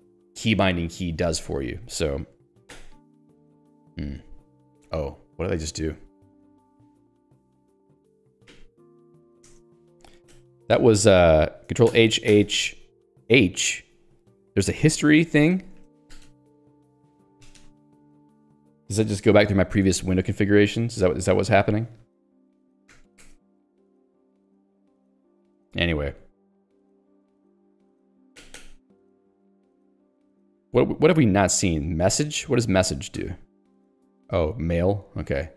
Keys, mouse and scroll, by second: 2.8 h, 8.2 Escape, 8.8 ctrl+alt+j, 9.5 Return, 9.8 Escape, 10.8 ctrl+g, 15.6 ctrl+g, 16.3-18.9 typing, 22.9 ctrl+g, 23.4 Escape, 24.3 j, 33.2 shift+m.